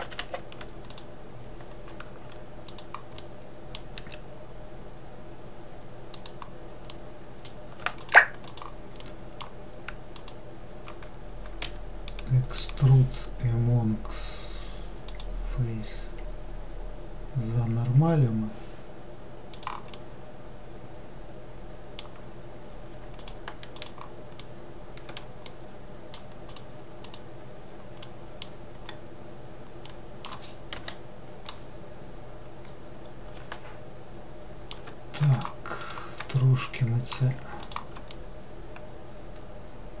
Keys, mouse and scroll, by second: 1.0 click, 2.8 click, 3.3 middle click, 4.0 s, 7.0-8.1 middle drag, 8.1 shift+click, 8.6 shift+click, 9.1-10.3 shift+middle drag, 10.3 shift+click, 11.7 e, 15.3 right click, 20.1-23.1 middle drag, 23.3 shift+click, 23.9 shift+click, 24.5-26.6 shift+middle drag, 26.6 click, 27.1 click, 28.1 middle click, 28.9-29.9 scroll up 1, 29.9 middle click, 30.8 KP_Decimal, 32.0-32.8 scroll down 1, 33.6-35.4 shift+middle drag, 35.4 shift+click, 35.9 shift+click, 36.4-37.7 middle drag, 37.7 shift+click, 38.2-40.0 middle drag.